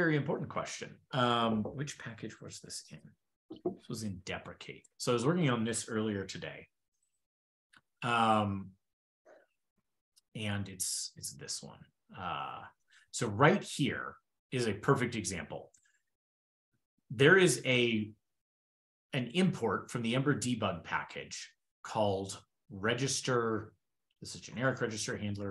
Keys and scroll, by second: 0.4 super+p, 13.8 super+Left, 21.6 shift+super+[, 24.3 super+f, 24.4 super+g, 25.3 super+g.